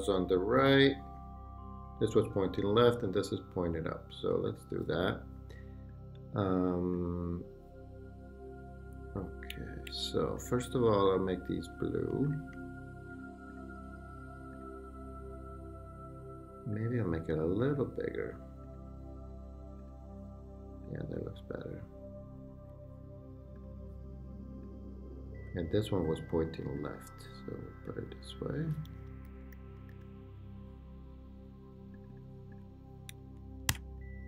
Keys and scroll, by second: 28.9 Left, 29.2 Right, 33.7 super+d.